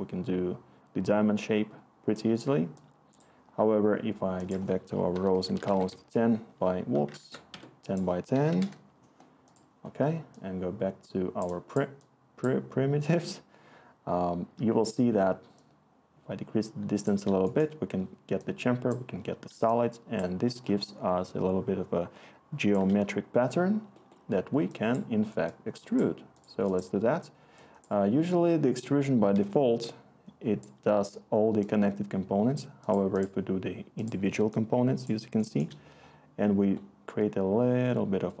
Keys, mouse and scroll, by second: 4.7-6.0 typing, 7.2 ctrl+z, 7.5 Escape, 8.1-9.0 typing.